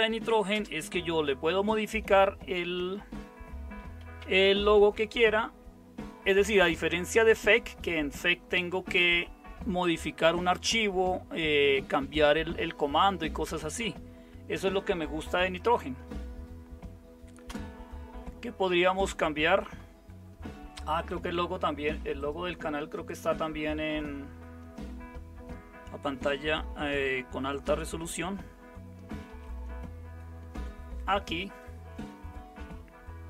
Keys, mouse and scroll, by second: 0.5 super+space, 3.7-33.2 typing, 17.5 Return, 29.3 super+w.